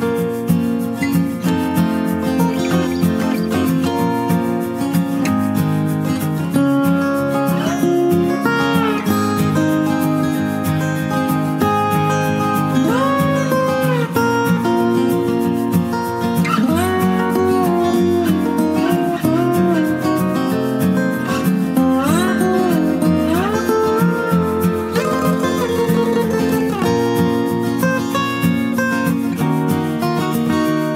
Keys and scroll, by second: 26.0 ctrl+alt+shift+e.